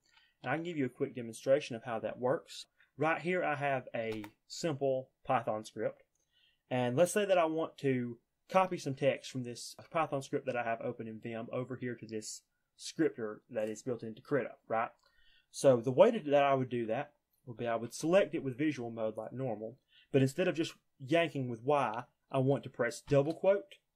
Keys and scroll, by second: 0.0 alt+4, 0.3 alt+3, 2.5 Up, 16.6 j, 17.1 k, 17.7 shift+v, 22.9 shift+'.